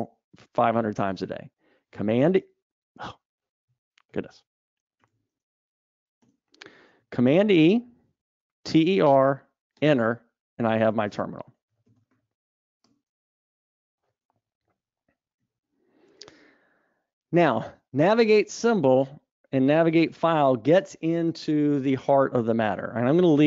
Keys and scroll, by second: 2.6 super+w, 5.3 super+e, 16.0 super+1.